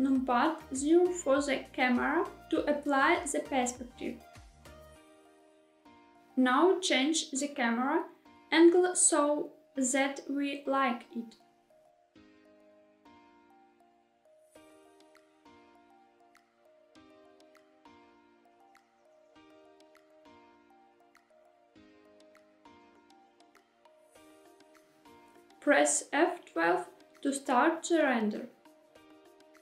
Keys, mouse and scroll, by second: 6.3 g, 7.7 x, 14.1 click, 15.6 g, 15.6 y, 19.0 click, 19.0 g, 19.2 z, 23.5-24.8 right drag, 26.1 F12.